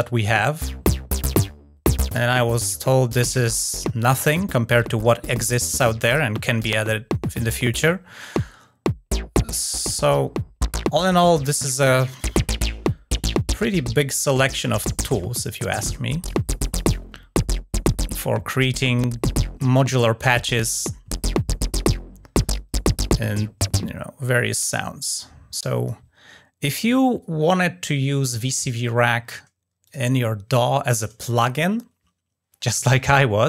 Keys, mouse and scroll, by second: 29.6 click.